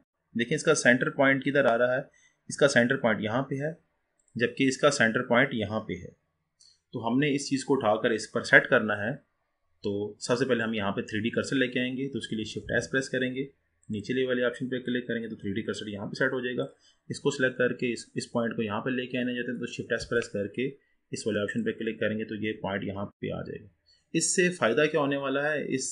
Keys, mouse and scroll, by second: 0.4-3.4 scroll up 2, 4.2 click, 10.6-12.7 middle drag, 12.7 shift+s, 16.7 drag, 20.1 shift+s, 21.7 click.